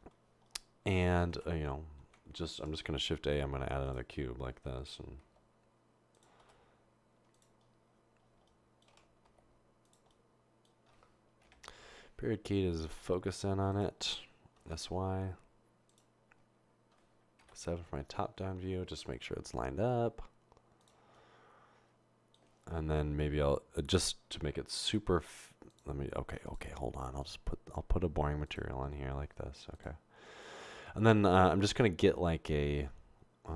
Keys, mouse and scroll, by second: 1.5 Tab, 2.0 Tab, 2.9 a, 5.2 g, 6.4 s, 8.9-9.3 typing, 11.5 typing, 12.8-14.7 typing, 17.4 typing, 19.2 typing, 27.2 click, 30.9 a.